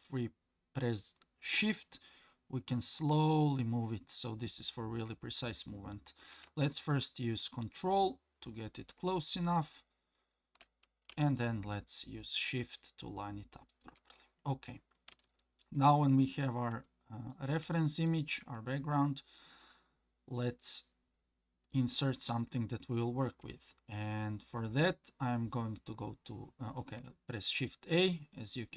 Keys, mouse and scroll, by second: 14.7-15.1 scroll up 2, 15.2-15.6 shift+middle drag, 16.1-16.7 scroll down 2, 16.8-17.3 shift+middle drag, 17.7-18.1 shift+middle drag, 21.6 click, 24.0 shift+a, 27.4 shift+a.